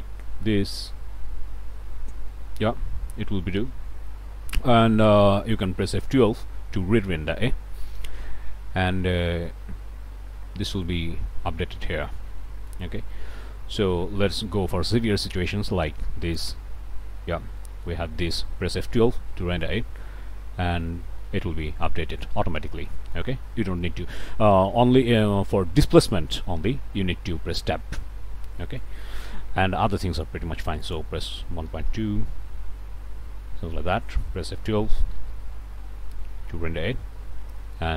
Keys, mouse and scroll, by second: 1.2-1.5 scroll up 1, 2.0 scroll down 1, 2.7 scroll down 1, 5.1 click, 6.2 F12, 11.6-12.9 middle drag, 13.1 middle click, 15.3-16.6 drag, 17.6 click, 18.9 F12, 21.4 click, 22.9 click, 23.8 click, 25.3 click, 26.4 middle click, 27.4 Tab, 28.6 click, 30.1 click, 30.8 click, 31.5 1, 31.7 ., 31.9 2, 32.3 Return, 33.7 click, 35.1 F12, 37.8-37.9 drag.